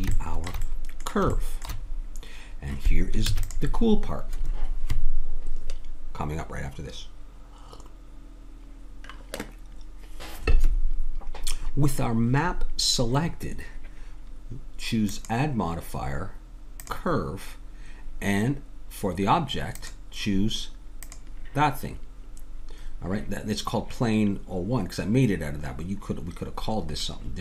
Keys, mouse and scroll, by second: 0.8 middle click, 3.3 ctrl+s, 15.1-17.7 drag, 19.8-23.0 middle drag, 27.0-27.4 middle drag.